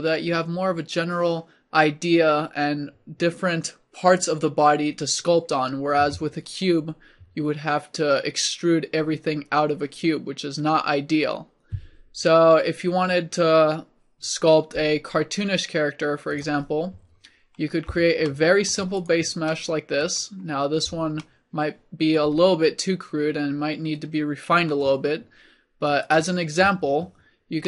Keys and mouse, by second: 6.1 Tab, 8.5 middle click, 16.3 middle click, 17.0 click, 23.0-24.3 middle drag, 26.1-27.6 drag.